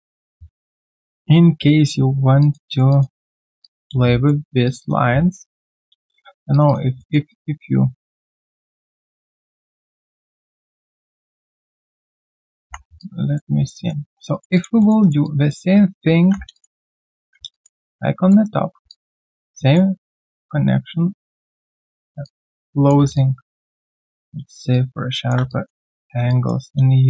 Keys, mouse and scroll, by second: 2.7 alt+right click, 2.9 alt+click, 3.6 alt+click, 4.0 right click, 4.8 double click, 5.1-5.6 alt+scroll down 1, 5.6 alt+click, 6.5 shift+click, 7.0 alt+middle click, 7.3 alt+click, 8.7 alt+middle click, 9.0 alt+click, 9.7 alt+middle click, 10.3 alt+click, 12.2 alt+right click, 12.6 1, 13.0 alt+click, 13.7 alt+middle click, 14.0 alt+click, 14.3 alt+right click, 14.5 alt+click, 14.8 alt+middle click, 15.0 alt+right click, 15.2 alt+click, 16.2 ctrl+1, 16.5 ctrl+1, 16.5 alt+click, 17.2 ctrl+1, 17.5 alt+click, 17.8 right click, 18.6 ctrl+1, 18.9 ctrl+1, 18.9 alt+click, 19.1 alt+right click, 19.5 alt+middle click, 22.2 shift+click, 23.1 alt+click, 23.9 alt+middle click, 24.7 shift+click, 25.5 alt+click.